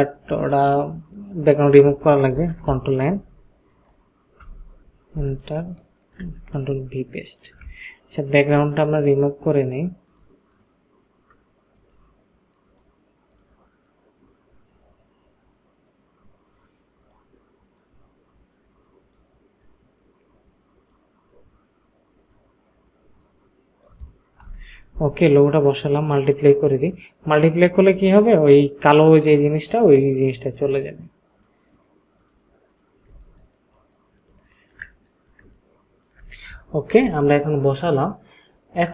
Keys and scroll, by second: 2.3 ctrl+n, 6.2 ctrl+v, 6.7 ctrl+space, 24.4 Return, 33.1 ctrl+space.